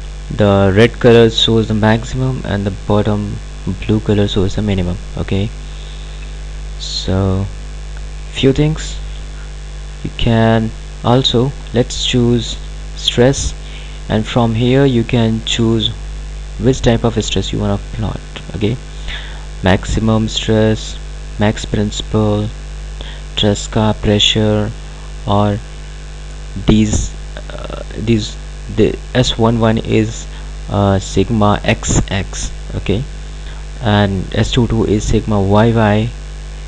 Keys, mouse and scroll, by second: 7.0-7.4 scroll up 1, 7.6-9.2 scroll down 1, 11.5 click, 15.5 click.